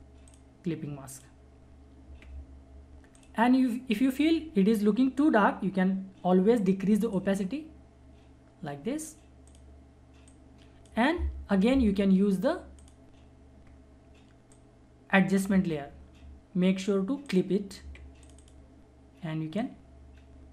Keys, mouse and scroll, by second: 7.1 click, 7.1-20.5 drag.